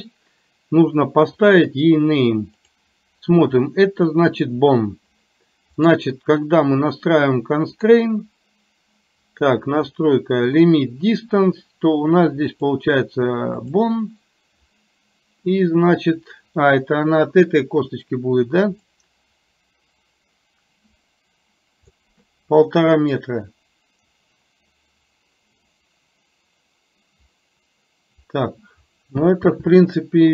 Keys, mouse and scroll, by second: 2.8 click, 5.9 click, 12.5-13.9 drag, 19.0-22.2 drag, 23.2-28.3 drag.